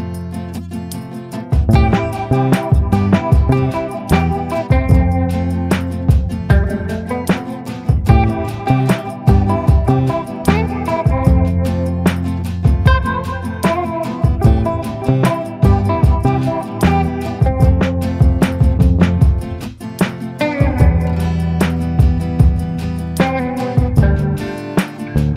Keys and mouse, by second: 1.8 middle click, 2.2 middle click, 2.6-4.7 drag, 4.8 a, 5.2 middle click, 5.6 shift+middle click, 6.3 shift+middle click, 7.7 middle click, 8.5 middle click, 10.1 shift+middle click, 10.9 middle click, 12.8 click, 13.6 click, 15.0 ctrl+z, 16.3 click, 17.2 ctrl+z, 18.0 click, 18.7 ctrl+i, 19.2 b, 20.2-25.3 typing.